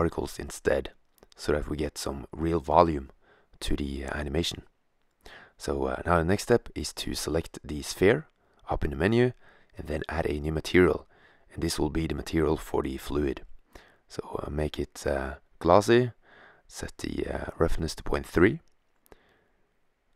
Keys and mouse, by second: 4.9 click, 5.9-7.1 middle drag, 7.7-9.2 drag, 11.1-12.6 drag, 14.7 click.